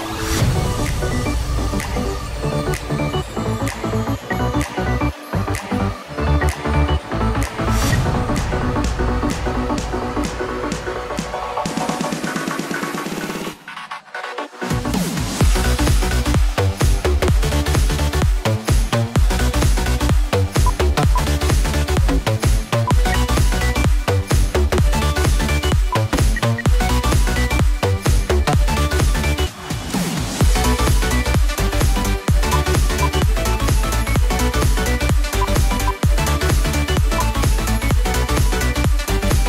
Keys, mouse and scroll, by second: 3.7 double click, 4.1 space, 5.1 right click, 6.2 space, 7.3 double click, 9.0 right click, 21.0 ctrl+click, 22.9 ctrl+z, 23.6 double click, 24.6 right click, 26.2 shift+End, 26.4 shift+Page_Down, 31.5 shift+Page_Up, 31.6 right click, 33.1 shift+click.